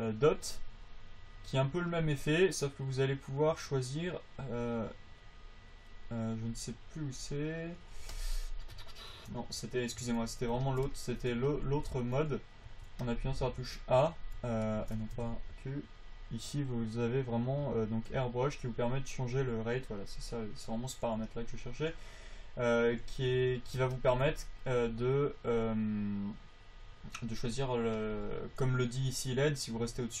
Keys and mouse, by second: 10.7-13.4 drag, 13.4 q, 14.5 q, 18.2 click, 18.5 a, 18.5 f, 22.2-23.9 drag, 23.7 f.